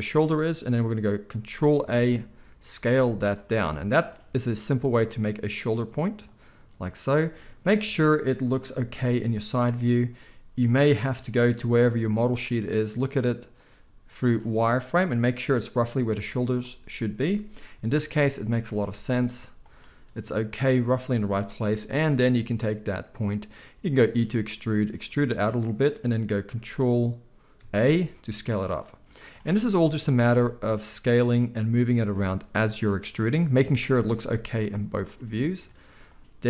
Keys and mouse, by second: 1.8 ctrl+a, 2.9 z, 4.4 g, 8.7 KP_3, 12.2 g, 13.7 z, 16.1 z, 19.6-25.8 drag, 23.8 e, 25.8-29.2 middle drag, 27.6 ctrl+a, 29.2 click, 29.3-29.6 middle drag, 29.6-31.2 drag, 30.1 ctrl+a, 31.2-34.7 middle drag, 32.5 g, 34.7-36.4 drag.